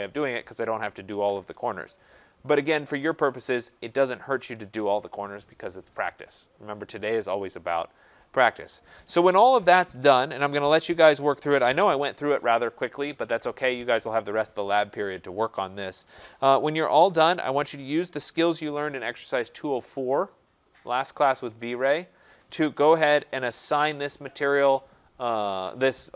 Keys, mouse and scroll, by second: 2.9-3.8 scroll, 3.8-4.2 scroll, 8.3 scroll.